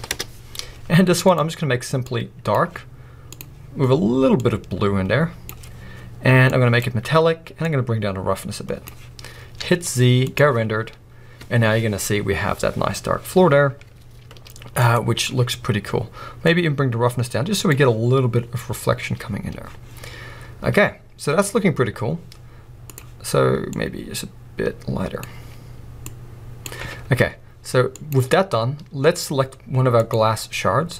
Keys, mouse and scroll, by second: 0.2 Return, 6.6-15.3 drag, 9.2-9.7 scroll down 1, 9.8 z, 16.6-23.7 drag, 28.2 z, 29.3 scroll up 1, 30.1 click.